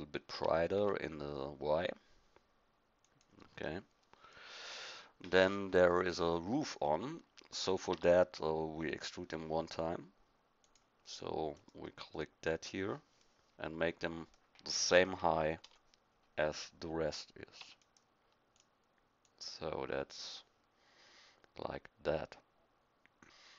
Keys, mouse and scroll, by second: 0.3 s, 3.6-6.0 middle drag, 7.9 Tab, 11.1 click, 12.1 middle click, 15.6 KP_1, 17.6 e, 18.9-20.8 drag.